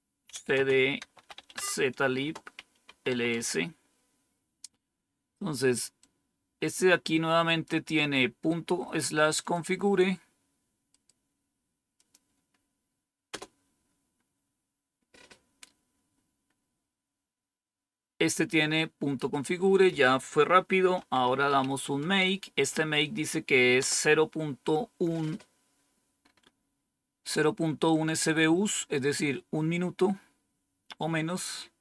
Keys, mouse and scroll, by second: 0.0-3.3 typing, 2.1 Return, 5.9-7.6 drag, 8.4 right click, 9.3 click, 9.7 click, 9.7 typing, 10.8 right click, 11.9 click, 17.4-19.7 scroll down 1, 19.7 click, 20.6-22.0 typing, 23.7 Return, 26.1-27.0 scroll up 1, 30.5-31.2 scroll down 1, 31.2-31.8 scroll down 1.